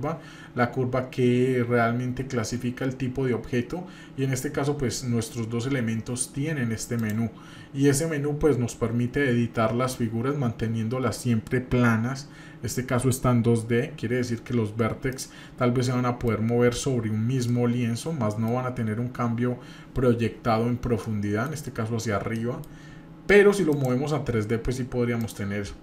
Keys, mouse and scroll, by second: 7.0 click, 15.2-16.2 middle drag, 17.2-18.2 scroll down 2, 17.5-18.5 middle drag, 21.0-21.5 middle drag, 22.3 middle click, 23.7 click, 25.2 click.